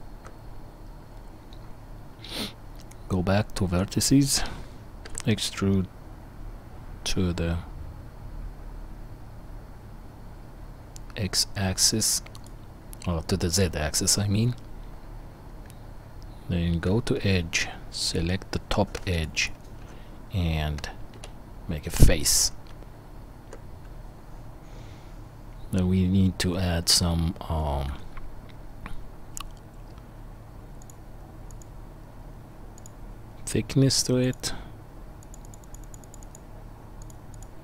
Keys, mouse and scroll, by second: 2.4 Tab, 5.0 e, 15.6 Tab, 19.1 alt+shift+click, 19.2 alt+shift+middle click, 19.4 alt+shift+click, 19.4-31.6 alt+shift+middle drag, 21.1 f, 22.7 Tab, 31.6-34.3 drag, 34.3-35.3 middle drag, 35.3-37.6 drag.